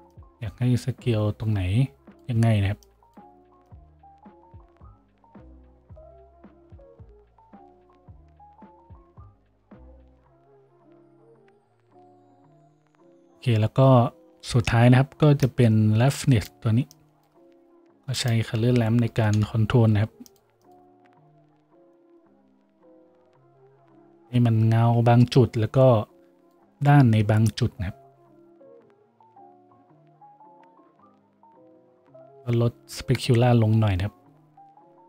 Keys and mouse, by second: 9.9 a, 17.8 shift+a, 22.1-35.0 middle drag.